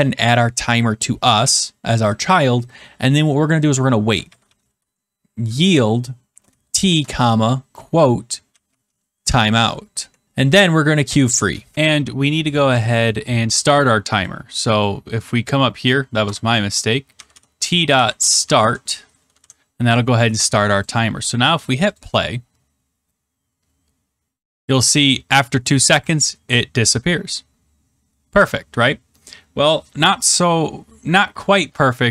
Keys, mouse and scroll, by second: 3.8-9.3 typing, 9.9 Right, 10.2 Return, 11.2-12.1 typing, 11.7 click, 14.2 click, 14.8 click, 16.2 Return, 16.8-18.7 typing, 19.3 ctrl+s, 20.8 click, 21.9 click.